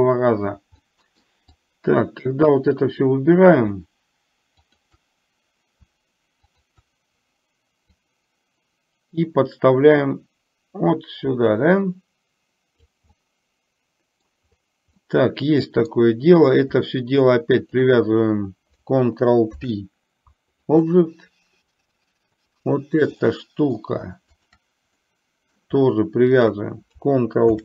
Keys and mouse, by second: 0.9 middle click, 1.5-2.7 drag, 4.7 shift+click, 6.5 shift+click, 8.2-12.9 drag, 13.3-14.3 middle drag, 15.0-16.0 middle drag, 17.7 shift+click, 19.5 ctrl+p, 22.5 drag, 23.3-23.8 middle drag, 24.4 shift+click, 25.2 middle click, 26.4 shift+click, 27.5 ctrl+p.